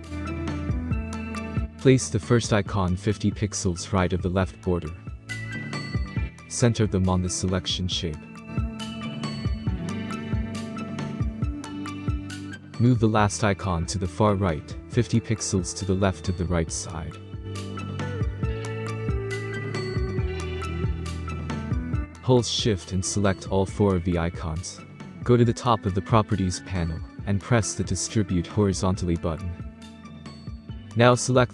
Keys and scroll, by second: 1.6 Right, 14.4 space, 17.9 Left.